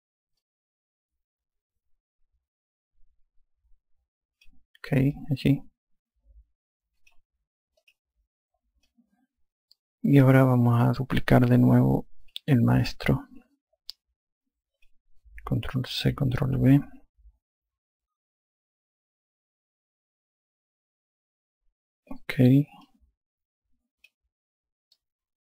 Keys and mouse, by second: 1.4 click, 6.2 alt+click, 8.9 click, 9.9 alt+click, 13.3 click, 15.8 click, 17.4 ctrl+v, 19.4 click, 23.9 click.